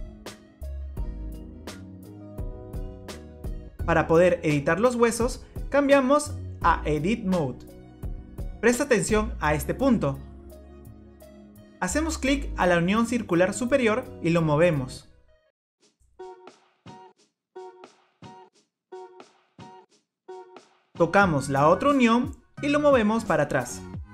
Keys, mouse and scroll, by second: 0.3 click, 0.9 click, 1.4 click, 1.5-1.9 scroll up 2, 1.8 middle click, 2.9 click, 3.1 click, 3.6 click, 3.8 click, 5.6 click, 7.7 click, 13.0 click, 14.8 click, 16.4 middle click, 17.0 scroll down 3, 17.8 scroll down 3, 18.0-18.7 scroll up 1, 18.7 click, 18.7-19.3 scroll up 1, 20.4 click, 21.7 click, 23.8 middle click.